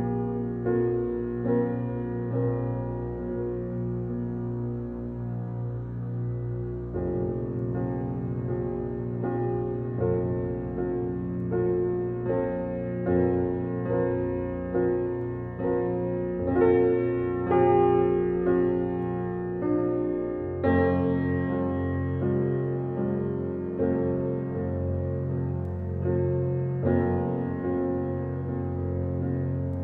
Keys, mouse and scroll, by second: 1.1 ctrl+d, 1.8-3.1 drag, 3.1 ctrl+d, 3.5-4.8 drag, 4.8 scroll down 1, 5.0 alt+click, 6.3 alt+click, 7.5-8.1 scroll up 1, 8.2 scroll down 1, 8.3 alt+click, 9.8 alt+click, 10.3 alt+right click, 10.9 alt+middle click, 11.2 alt+right click, 11.8-14.6 alt+drag, 14.6 F7, 15.2 scroll up 1, 15.7 alt+middle click, 16.4 click, 17.3-20.8 right drag, 20.8 click, 24.9 F7.